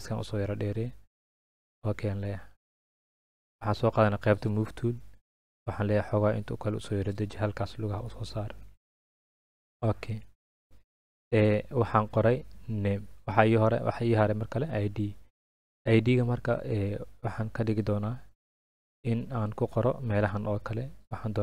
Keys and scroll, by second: 8.6 Up.